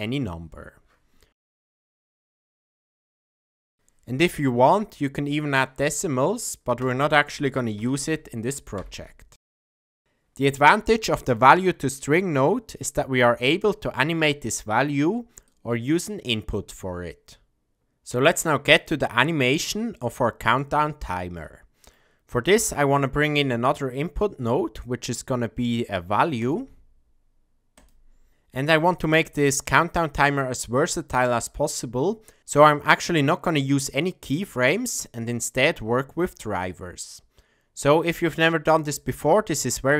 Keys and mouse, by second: 5.2 click, 5.7 click, 7.8 click, 10.0 shift+click, 10.6 click, 15.5-16.7 drag, 18.8-20.4 middle drag, 21.5 middle click, 22.6 shift+a.